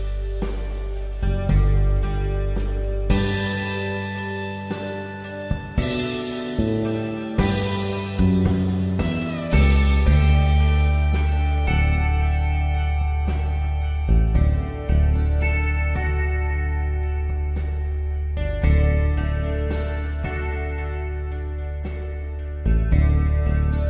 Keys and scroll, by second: 14.8 b.